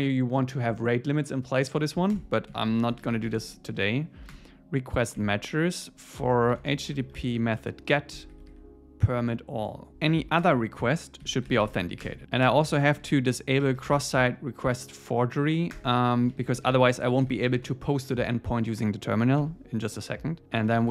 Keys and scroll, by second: 2.1 Return, 4.3 Return, 5.2 Escape, 7.6 Tab, 8.1 Escape, 9.9 Return, 10.4 Return, 12.0 Return, 12.4 Return, 15.7 Return, 18.5 Tab, 20.4 Return.